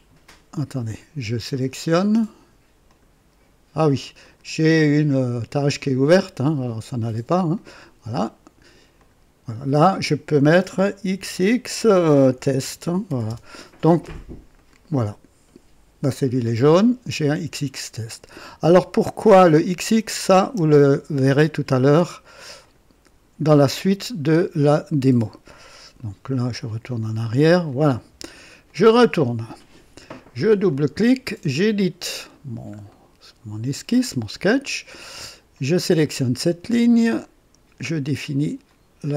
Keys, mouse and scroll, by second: 0.8 click, 1.5 click, 2.8 click, 4.2 click, 5.4 click, 7.5 click, 8.9 click, 11.1-13.5 typing, 14.5 click, 16.6 click, 19.6 click, 21.2 typing, 22.6 click, 22.7-23.4 typing, 23.7 click, 26.4 z, 26.9 ctrl+click, 27.6-28.3 typing, 27.7 ctrl+click, 28.7 ctrl+click, 30.5 click, 31.5 right click, 32.4 scroll down 1, 32.4 typing, 32.9 right click, 33.5 typing, 35.5 click, 38.7 click.